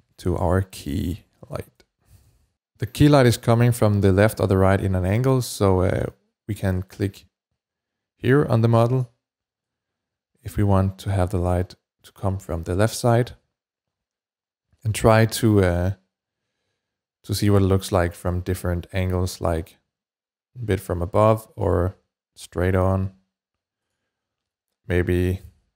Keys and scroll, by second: 0.0-1.9 typing, 2.1 Return.